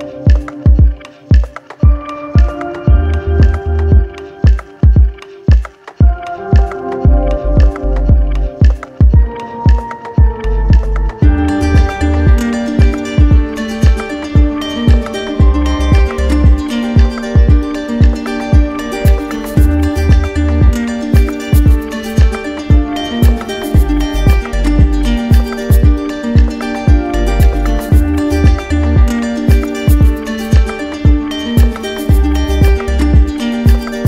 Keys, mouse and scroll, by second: 5.8 click, 7.4 alt+click, 8.0 ctrl+z, 10.5 click, 11.3 click, 22.7 click, 25.7 alt+click, 30.6 click.